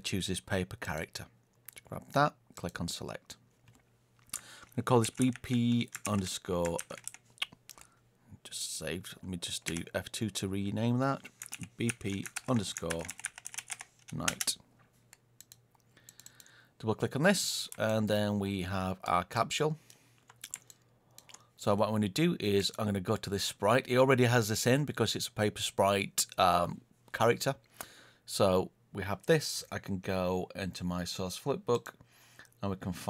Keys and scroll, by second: 9.6 F2.